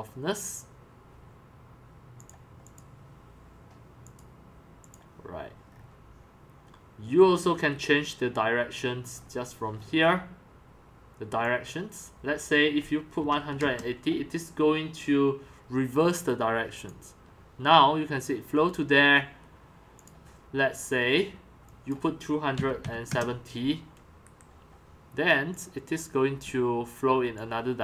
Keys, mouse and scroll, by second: 5.7-6.6 scroll down 4, 7.5-7.8 scroll, 9.0-10.5 scroll, 9.1-11.7 middle drag, 11.4 click, 11.7 click, 12.9-14.1 typing, 16.5 click, 17.0-22.6 drag, 22.3-23.6 typing, 24.2 Return, 25.6 click, 26.6-27.5 c, 27.7-27.8 drag.